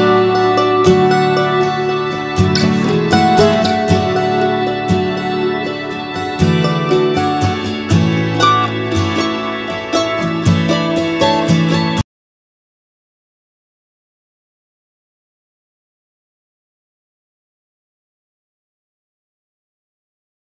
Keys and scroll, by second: 8.1 ctrl+shift+s.